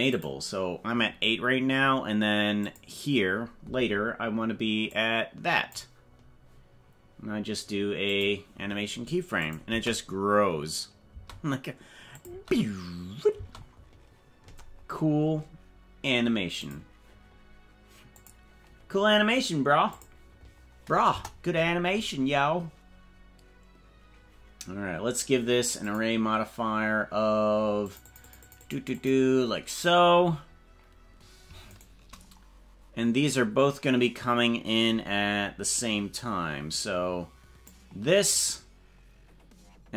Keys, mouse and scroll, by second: 0.2 click, 2.6 click, 5.0 click, 8.1 click, 9.5 click, 9.7 space, 11.1 space, 12.3 click, 12.3 space, 13.5 space, 16.7 click, 18.3 click, 20.1 click, 21.1 KP_0, 25.8 click, 27.8 click, 28.0 click, 29.0 click, 31.9 shift+right click, 35.7-37.7 drag.